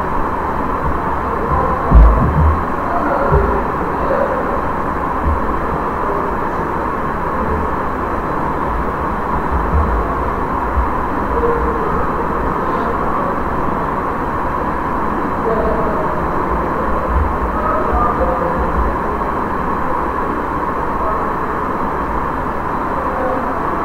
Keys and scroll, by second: 10.2 ctrl+v.